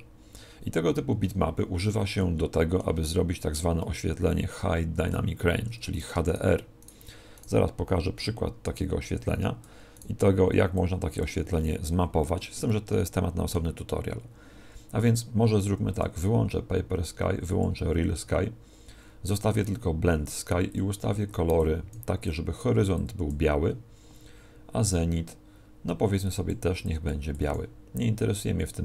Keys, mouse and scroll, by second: 0.9 Escape, 2.2 middle click, 5.9 right click, 6.2 shift+right click, 8.8 click, 9.9 right click, 11.8 middle click, 12.6 middle click, 15.9 click, 20.7 click, 24.8 click.